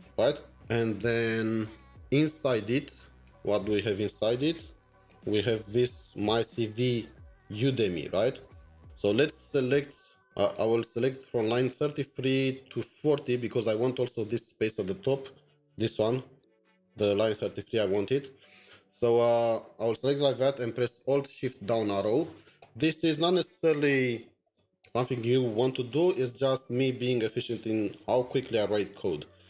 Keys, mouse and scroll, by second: 3.2 Return, 3.3 alt+Tab, 5.0 double click, 8.5 double click, 8.6 alt+Tab, 15.6 alt+\, 18.0 alt+\, 21.7 alt+shift+Down.